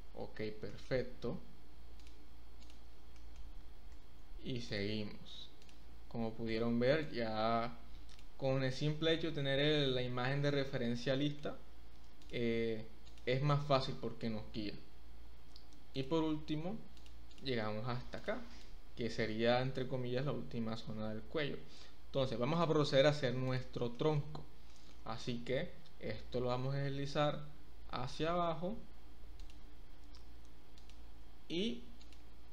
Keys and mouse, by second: 0.7 shift+middle click, 2.0 click, 2.6 click, 3.1 shift+middle click, 3.6 e, 3.9 z, 4.7 click, 6.4 click, 7.0-8.1 drag, 11.2 shift+middle click, 12.2 click, 13.0 click, 13.9 e, 14.2 z, 15.9 click, 16.9 click, 17.3 click, 18.1 click, 18.6-19.7 drag, 22.5 click, 23.9 shift+click, 24.6 shift+click, 25.5 e, 26.5 z, 30.7 drag, 32.0 click.